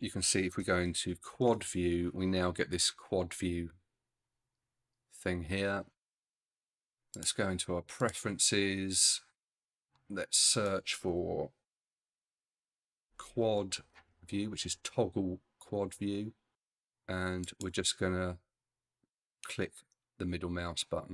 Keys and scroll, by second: 0.6 ctrl+alt+n, 1.3 ctrl+alt+q, 11.9 shift+q, 12.3 shift+u, 12.4 a, 12.8 d.